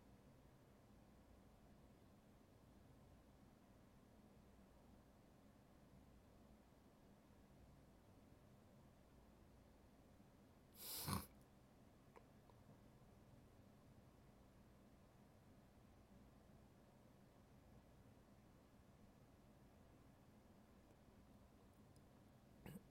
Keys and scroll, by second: 8.4 ctrl+z.